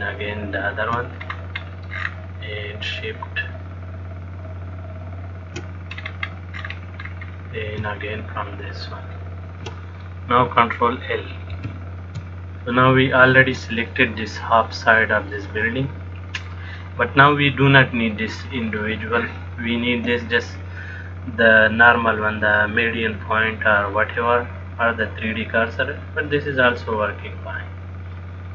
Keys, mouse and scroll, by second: 0.0 shift+click, 1.5-2.2 scroll up 3, 2.2-2.8 scroll down 1, 2.8-3.3 scroll down 6, 5.3 shift+click, 6.3-6.9 scroll up 3, 6.9-7.8 scroll down 7, 9.2 shift+click, 12.0 ctrl+l, 14.1 middle click, 19.0 click, 24.4 middle click.